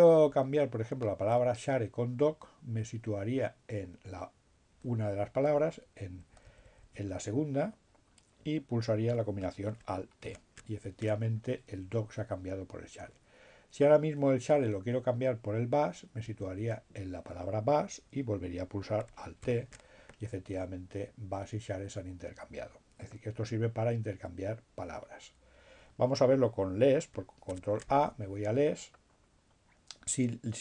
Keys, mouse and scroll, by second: 2.9 Right, 10.2 alt+t, 15.4 Right, 19.4 alt+t, 25.0 ctrl+a.